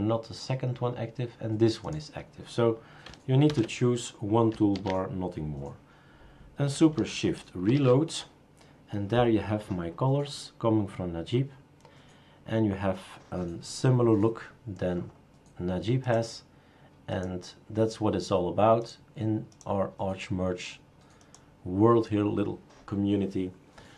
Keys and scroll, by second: 3.5 #, 4.7 ctrl+s.